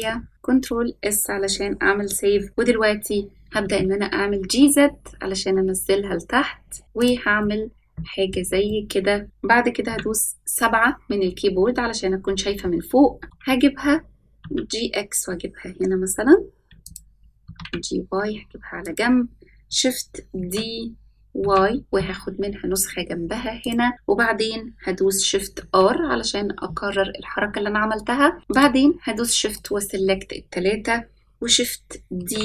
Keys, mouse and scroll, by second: 0.3 ctrl+s, 3.4 g, 7.4-8.3 middle drag, 8.6-9.2 middle drag, 9.8 KP_7, 13.2 g, 17.4 g, 20.3 shift+d, 25.5 shift+r, 28.4 shift+click, 29.5 shift+click, 32.1 shift+d.